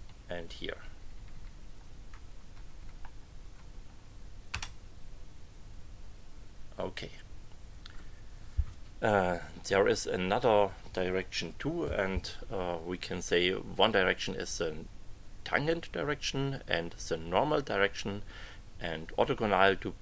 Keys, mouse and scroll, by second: 0.8 Page_Up, 2.5 Page_Up, 4.5 Return.